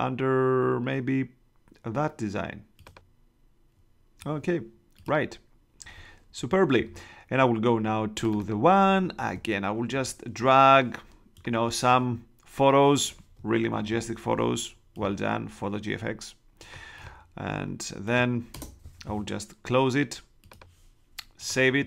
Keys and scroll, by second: 9.1 super+Tab, 13.7 super+-, 14.9 alt+shift+super+-, 18.5 shift+Return.